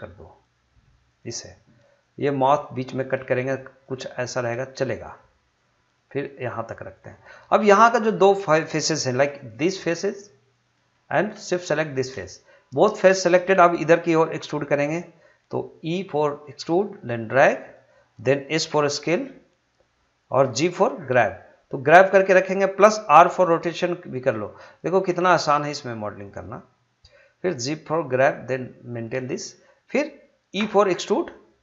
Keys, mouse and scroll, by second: 1.0 click, 2.2 g, 3.0 click, 3.9 g, 5.1 click, 6.0 g, 6.9 click, 9.1 3, 10.5 click, 11.8 shift+click, 16.4 e, 17.7 click, 18.7 s, 20.3 click, 20.8 g, 22.4 click, 23.3 r, 26.2 click, 27.7 g, 29.2 click, 30.6 e.